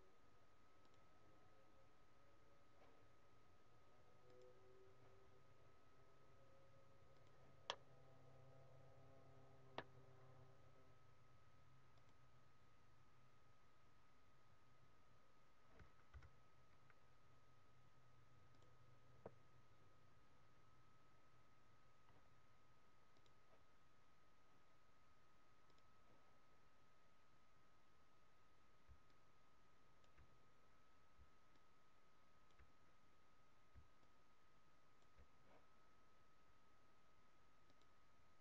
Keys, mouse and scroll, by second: 4.3 click, 7.1 click, 7.6 middle click, 12.0 click, 16.1 KP_7, 18.5 click, 23.0 click, 25.7 click, 29.0 click, 30.1 d, 31.4 click, 32.6 d, 34.0 click, 35.1 d, 37.6 click.